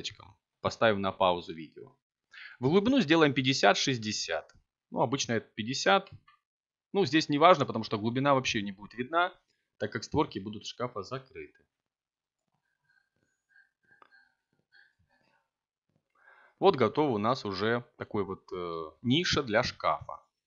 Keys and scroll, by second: 5.4 a, 9.4 Tab, 14.9 a.